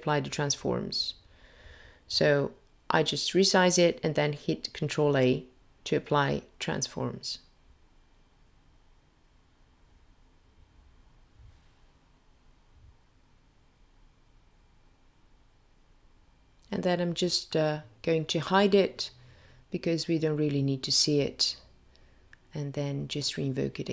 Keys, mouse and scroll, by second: 9.3 ctrl+a, 16.4 click, 17.7 click, 19.9 click.